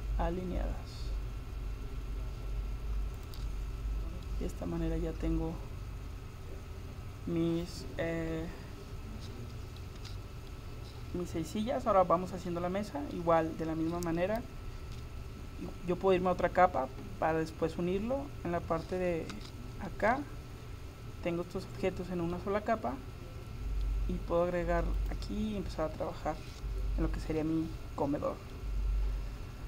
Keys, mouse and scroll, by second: 3.8-6.2 middle drag, 10.0 a, 10.5 middle click, 12.3 middle click, 15.0 KP_7, 19.4 Tab, 22.4-24.2 middle drag, 25.0-26.8 drag, 28.6 middle click.